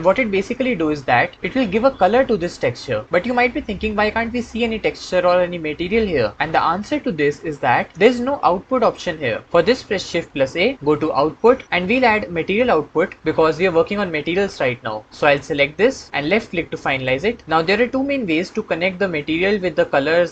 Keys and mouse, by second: 10.1 shift+a.